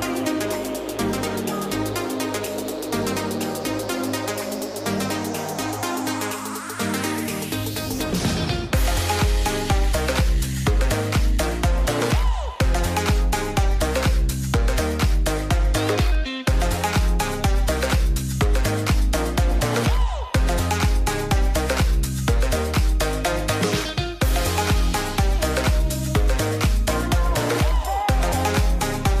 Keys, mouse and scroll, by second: 8.3 click, 13.9-15.1 drag, 16.0 click, 22.0-23.9 drag, 27.0-29.2 drag.